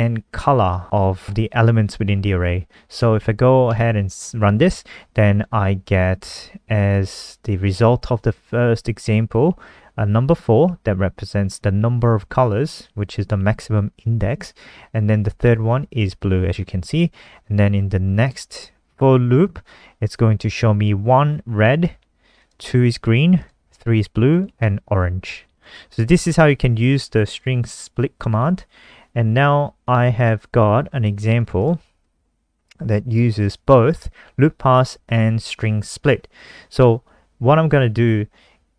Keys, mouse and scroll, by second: 3.2 ctrl+s, 3.9 F5, 18.4 click, 27.8-29.5 scroll down 2, 29.5-30.4 scroll down 1, 30.4 click, 31.6 ctrl+c, 31.8 click, 33.8 ctrl+v.